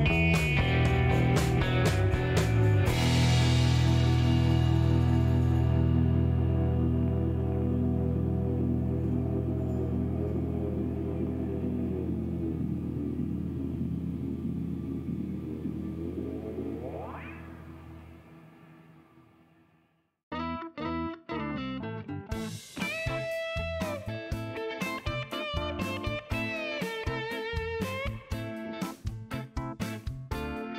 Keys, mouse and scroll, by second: 0.2 Return, 1.7 click, 2.7 click, 3.3 5, 3.6 Return, 5.4 click, 6.1 click, 7.1 click, 7.7 5, 7.9 Return, 11.1 click, 12.2 click, 12.9 Delete, 14.7 click, 15.2 click, 16.9 click, 18.7 click, 19.2 click, 19.7 click, 20.4 click, 20.9 click, 22.4 click, 24.2-25.1 typing, 26.4 click, 28.8-30.7 drag.